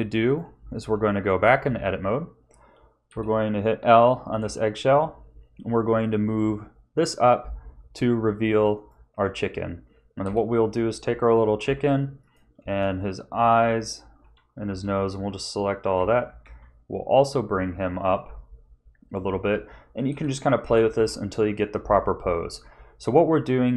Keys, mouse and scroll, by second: 1.0 shift+middle click, 1.6 a, 3.1 l, 4.4 g, 9.1 a, 10.2 l, 11.6 g, 13.5 l, 14.2 l, 14.6 l, 15.9 g, 19.2 a, 20.1 l, 20.6 g.